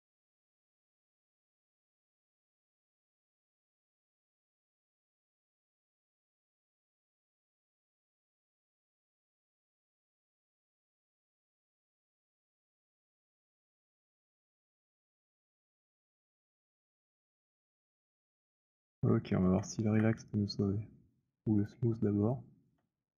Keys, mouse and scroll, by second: 0.2 click, 4.1 alt+click, 4.9 click, 6.1 alt+click, 8.9 click, 10.5 click, 18.2 alt+click, 18.8 middle click, 19.2 alt+middle click, 19.4 alt+middle click, 19.7 w, 21.0 right click, 21.4 click, 22.7 alt+click.